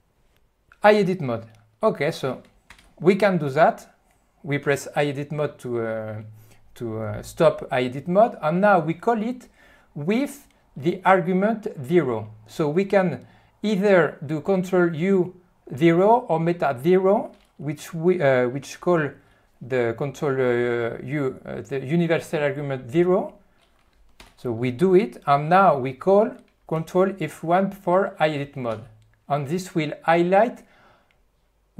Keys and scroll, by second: 2.7 ctrl+F1, 24.2 alt+0, 28.9 ctrl+F1.